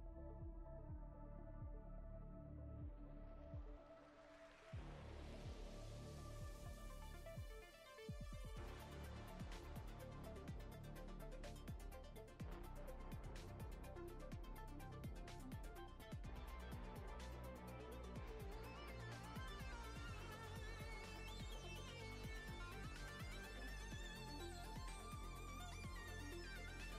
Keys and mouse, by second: 0.2 click, 0.5 click, 0.7 middle click, 1.2 middle click, 1.4 ctrl+middle click, 1.6 middle click, 2.0 click, 2.1 click, 2.3 click, 2.5 click, 2.7 click, 2.9 click, 3.1 click, 3.4 click, 4.0 click, 4.2 click, 4.4 click, 4.6 click, 4.8 click, 4.9 click, 5.1 middle click, 5.5 ctrl+middle click, 5.7 middle click, 6.1 click, 6.4 click, 6.6 click, 6.7 click, 7.0 middle click, 7.4 click, 7.6 click, 7.8 click, 8.0 shift+middle click, 8.2 middle click, 9.2 middle click, 9.5 middle click, 9.8 middle click, 10.1 ctrl+middle click, 10.2 shift+middle click, 10.4 middle click, 11.0 click, 11.1 click, 11.3 click, 11.5 click, 11.7 click, 11.8 click, 12.1 click, 12.2 click, 12.6 click, 12.9 click, 13.1 click, 13.2 click, 13.4 click, 13.5 click, 13.7 click, 14.0 click, 14.2 click, 14.4 click, 14.8 click, 14.9 click, 15.3 click, 15.5 click, 15.7 click, 15.8 click, 16.0 click, 16.2 middle click, 16.6 click, 16.8 middle click, 17.1 middle click, 17.5 middle click, 18.1 KP_7, 18.7 shift+middle click, 19.0 ctrl+middle click, 19.5 click, 19.7 click, 19.9 click, 20.0 click, 20.2 click, 20.4 middle click, 21.3 click, 21.4 click, 21.6 click, 21.7 click, 22.3 [, 22.3 [, 22.6 click, 22.7 click, 23.0 click, 23.2 click, 23.3 click, 23.5 middle click, 23.9 click, 24.1 click, 24.3 middle click, 24.5 ], 24.6 ], 24.7 middle click, 25.2 click, 25.4 click, 25.6 click, 25.7 click, 26.0 click, 26.3 click, 26.5 click, 26.7 middle click.